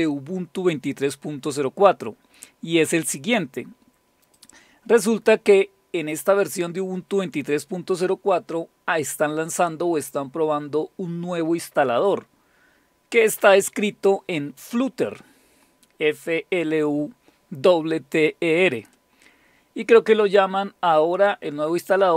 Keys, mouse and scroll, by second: 4.2 click, 12.6-13.2 scroll down 2, 13.2-19.2 scroll down 1, 19.2-22.1 scroll down 1.